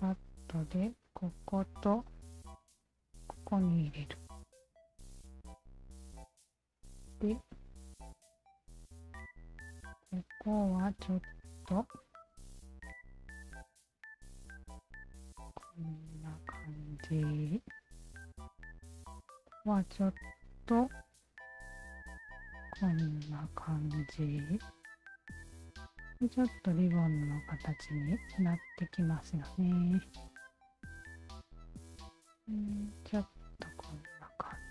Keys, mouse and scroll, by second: 0.5-1.6 alt+drag, 2.2 alt+click, 4.5 1, 5.5 shift+q, 6.0 alt+right click, 6.9 click, 8.7 shift+click, 10.5 shift+click, 10.9 alt+right click, 11.4 w, 12.0-13.3 shift+drag, 13.8 shift+click, 15.2-16.7 shift+drag, 18.0 shift+click, 18.5 alt+click, 19.6-21.1 alt+drag, 21.6 alt+click, 22.4-23.9 alt+drag, 24.2-26.5 alt+drag, 26.9 alt+right click, 27.2 alt+click, 28.7 right click, 29.2 alt+right click, 30.1 alt+click, 31.7-33.2 alt+drag, 34.5 alt+click.